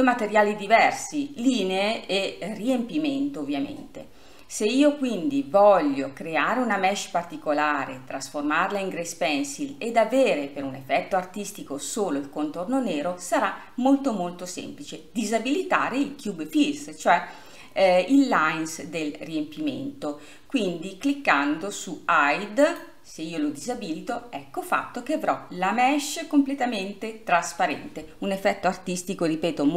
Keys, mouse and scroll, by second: 6.9-9.4 scroll up 1, 10.4-11.1 scroll up 1, 11.1-14.4 scroll up 1, 22.6 scroll up 1, 22.8-24.9 drag, 24.9-27.9 middle drag.